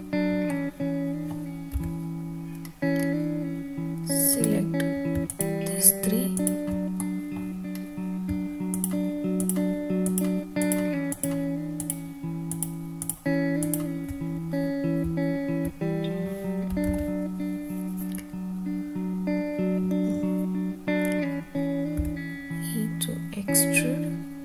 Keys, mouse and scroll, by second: 0.5 middle click, 1.7 3, 2.6-3.2 scroll up 2, 4.3 click, 5.3 shift+click, 6.3 shift+click, 7.0 middle click, 7.7-8.2 scroll up 1, 8.7 shift+click, 9.4 shift+drag, 10.0 shift+click, 10.6 shift+click, 11.1 shift+click, 11.8 shift+drag, 12.5 shift+click, 13.0 shift+click, 13.6 shift+click, 15.0 `, 16.9 alt+z, 20.0 click, 23.2 e.